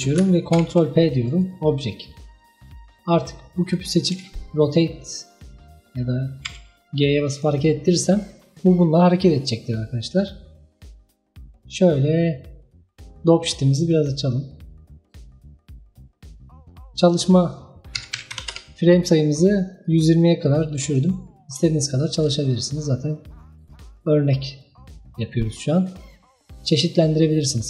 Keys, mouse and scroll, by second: 0.6 ctrl+p, 3.7 click, 4.2 r, 6.5 g, 7.7 scroll down 1, 8.2 scroll up 1, 13.8-16.1 drag, 16.1-17.0 middle drag, 17.0-20.0 drag, 21.3-21.9 scroll down 1, 21.9-25.7 ctrl+middle drag, 26.0-26.9 drag, 26.9-27.4 scroll down 1, 27.4-27.6 middle drag.